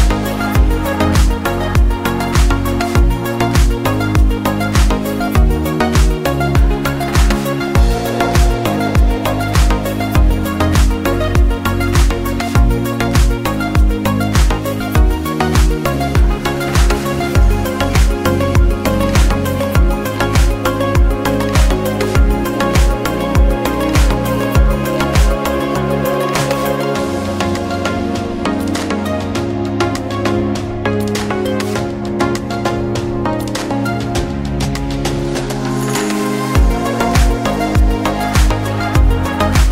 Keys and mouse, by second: 3.3 click, 3.3 right click, 5.0-5.8 drag, 7.6 shift+d, 17.5 click, 19.1-21.1 drag, 22.2-23.2 drag, 27.4 middle click, 28.1-29.2 drag, 33.9-37.1 drag, 37.4-38.5 drag.